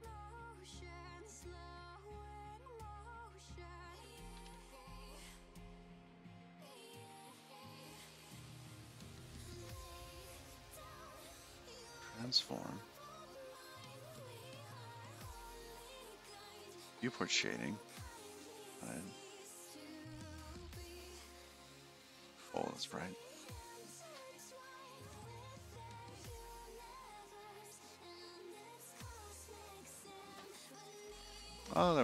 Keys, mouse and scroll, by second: 1.7 click, 5.9 shift+super+b, 9.1 click, 9.7 click, 11.7 click, 14.1 click, 16.4 click, 19.7 click, 20.3 click, 22.2 click, 24.1 click, 25.7 click, 26.1 click, 27.0 click.